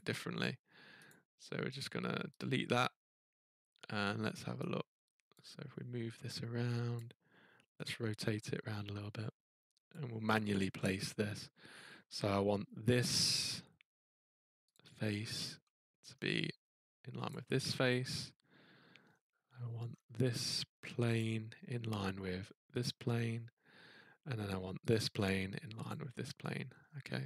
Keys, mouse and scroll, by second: 1.1 click, 1.8 right click, 2.4 click, 6.9 click, 9.9 click, 10.6-11.0 scroll, 12.7-13.5 scroll, 14.7 click, 14.7-15.3 scroll, 16.1 scroll, 17.3 click, 17.3-18.6 scroll, 19.0 scroll, 19.9-20.2 scroll, 21.2 click, 22.8 click, 24.9 click, 25.9 click, 26.6-27.1 scroll.